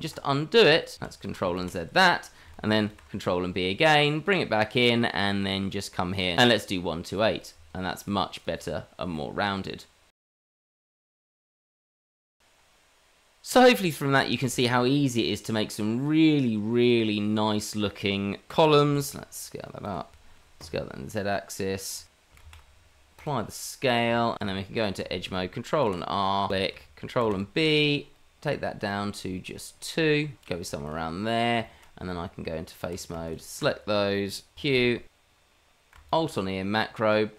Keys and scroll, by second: 0.9 shift+z, 2.0 shift+z, 7.5 Tab, 14.5 shift+a, 17.5 g, 18.8 s, 20.1 s, 22.4 ctrl+a, 24.4 Tab, 25.8 ctrl+r, 27.2 ctrl+b, 32.1 Tab, 34.5 q.